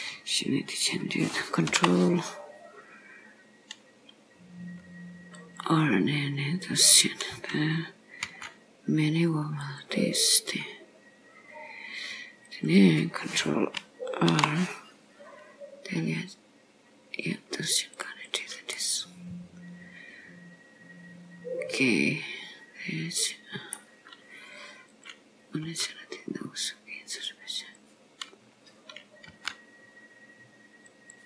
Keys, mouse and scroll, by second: 1.8 ctrl+r, 8.2 g, 9.8 click, 12.5 click, 14.4 ctrl+r, 18.8 middle click, 25.0 click, 25.8 g, 28.4 scroll up 2, 29.4 g.